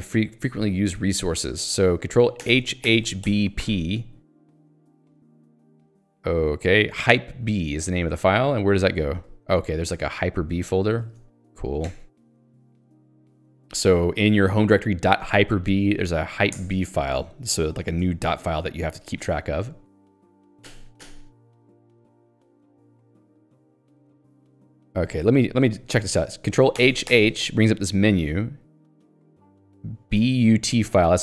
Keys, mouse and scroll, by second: 3.3 b, 7.2 p, 11.1 ctrl+s, 11.9 y, 12.7 super+e, 16.6 Return, 23.2 b, 24.6 ctrl+g.